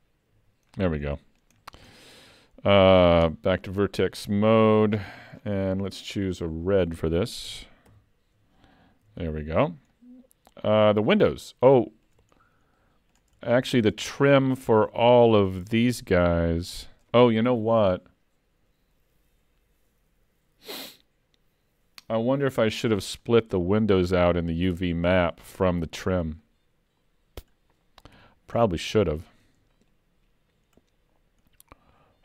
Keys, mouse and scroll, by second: 0.3 l, 0.7 scroll down 4, 1.2 middle click, 1.6 scroll down 2, 1.9 shift+middle click, 3.3 Tab, 5.0-6.3 scroll down 12, 6.3 click, 7.9 shift+k, 9.1 alt+a, 9.6-10.0 scroll up 5, 10.0 middle click, 10.9 scroll down 3, 11.9 shift+middle click, 12.4-12.7 scroll up 3, 12.8 middle click, 13.5 shift+middle click, 14.2 middle click, 15.0-15.4 scroll up 3, 26.5 middle click, 28.2 3, 28.6 scroll down 6, 29.1 shift+middle click, 30.8-31.2 scroll up 3, 31.6 scroll up 2.